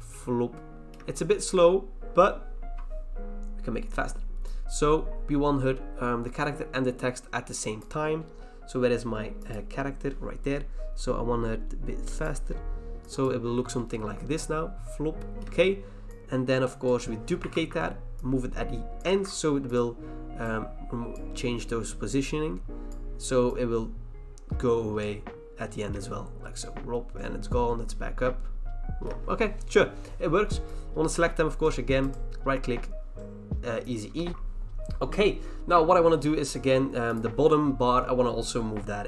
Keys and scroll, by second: 17.5 ctrl+c, 19.1 ctrl+v.